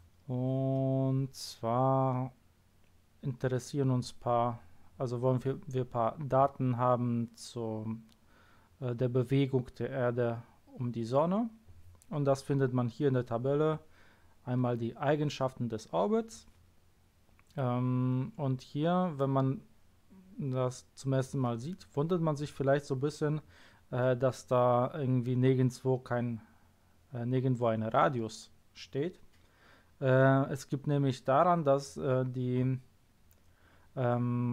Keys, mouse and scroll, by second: 1.6-3.6 scroll down 2.